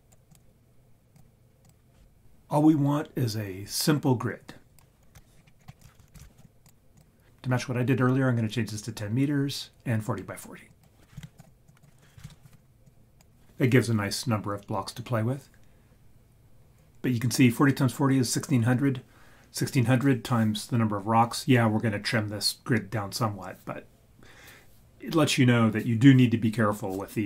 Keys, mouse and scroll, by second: 0.0 click, 0.3 click, 1.6 click, 4.5 drag, 5.1 x, 5.3 scroll up 1, 5.4 scroll down 1, 5.5 scroll down 1, 6.0 shift+a, 10.7 click, 11.7 click, 12.8-14.7 drag.